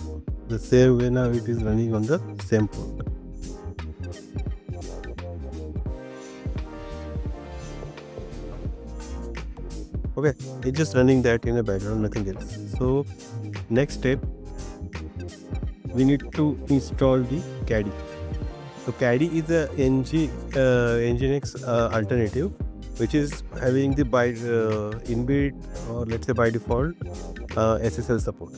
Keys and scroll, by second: 0.6 BackSpace.